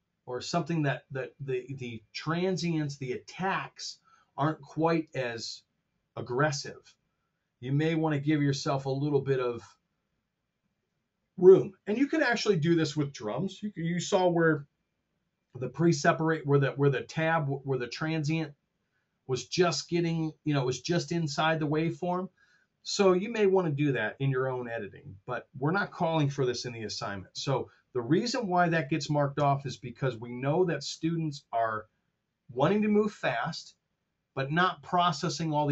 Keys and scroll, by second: 27.0 Delete, 29.2 super+Tab.